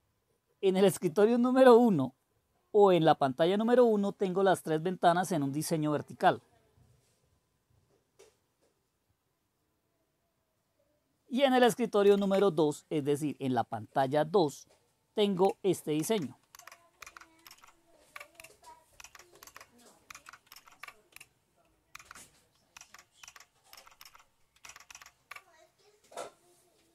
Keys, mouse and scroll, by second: 12.0 super+2, 15.9 super+Down, 16.5 super+Right, 17.0 super+Left, 19.4 super+Right, 21.9 super+Left, 22.7 super+Down, 23.2 super+Down, 23.7 super+Up, 24.0 super+Up, 24.6 super+Down.